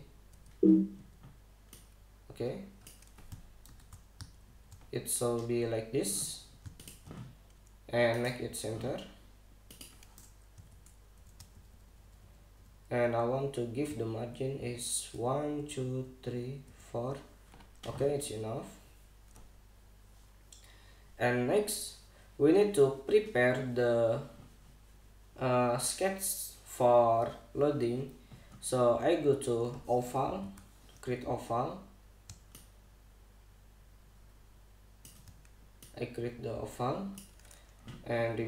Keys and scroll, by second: 1.0 Escape, 4.3 super+-, 5.1 super+=, 11.3 shift+Down, 12.2 shift+Up, 13.7 Down, 14.5 shift+Down, 15.8 shift+Up, 31.1 o.